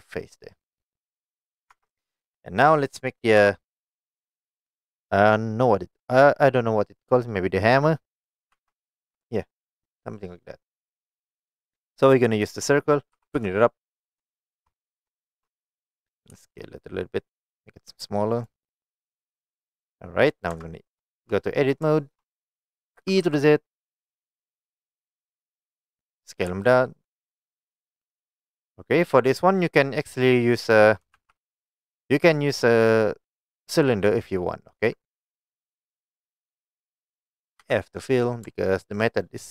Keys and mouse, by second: 1.1 middle click, 1.8 Tab, 2.1 click, 3.5 KP_1, 8.6 shift+a, 13.2 g, 13.4 z, 14.2 shift+click, 14.5 shift+middle drag, 15.3 shift+middle click, 16.4 s, 18.4 click, 20.6 Tab, 21.2 shift+middle click, 22.1 shift+middle click, 23.0 e, 23.3 z, 26.1 click, 26.6 s, 29.0 click, 31.2 shift+a, 35.8 middle click, 37.7 f, 38.0 middle click.